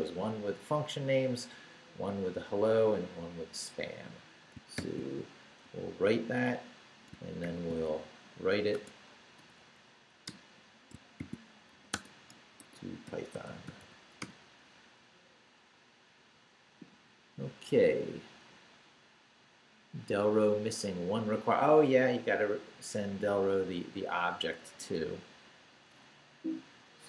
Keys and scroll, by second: 4.7 shift+;, 5.6 shift+w, 6.3 shift+w, 7.4 shift+;, 7.8 shift+w, 8.7 space, 9.4 BackSpace, 10.2 Return, 10.9 shift+Return, 11.2-14.1 typing, 14.2 Return, 24.8 q, 26.3 Down.